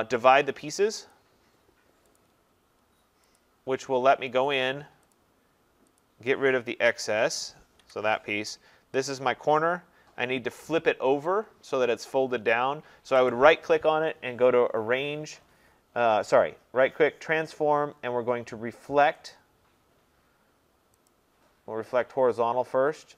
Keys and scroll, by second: 7.8 Delete.